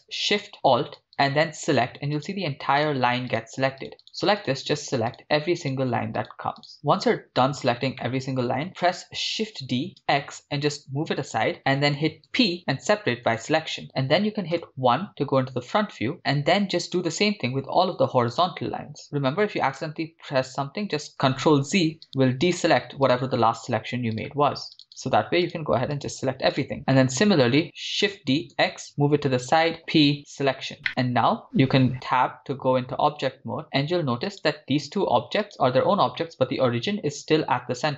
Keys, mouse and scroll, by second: 1.0 alt+shift+right click, 1.2 alt+shift+click, 1.2 alt+shift+right click, 2.3 alt+shift+right click, 3.0 alt+shift+right click, 3.3 alt+shift+click, 3.3 alt+shift+right click, 4.0 alt+shift+right click, 4.4 alt+shift+right click, 5.1 alt+shift+right click, 5.1 alt+shift+click, 5.1 alt+shift+right click, 6.2 alt+shift+right click, 6.2 alt+shift+click, 6.2-7.1 alt+shift+right click, 6.6 alt+shift+click, 6.6 alt+shift+right click, 8.1 middle click, 8.7 scroll down 3, 9.4 shift+d, 10.2 x, 11.9 ctrl+click, 12.6 p, 14.6 KP_1, 15.4-15.9 scroll up 3, 15.9 shift+middle click, 17.6 alt+shift+right click, 18.4 alt+shift+right click, 19.0 alt+shift+right click, 21.4 ctrl+z, 22.6 alt+shift+right click, 23.2 alt+shift+right click, 24.2 alt+shift+click, 24.2 alt+shift+right click, 24.9 alt+shift+click, 24.9 alt+shift+right click, 25.5 alt+shift+click, 25.5 alt+shift+right click, 26.3 alt+shift+right click, 26.6 alt+shift+click, 26.6 alt+shift+right click, 27.0 alt+shift+right click, 27.0-27.6 scroll down 3, 28.2 shift+d, 28.5 x, 29.5 ctrl+click, 30.2 p, 30.9 middle click, 32.4 Tab, 33.2 scroll down 1, 34.3 right click, 36.0 right click.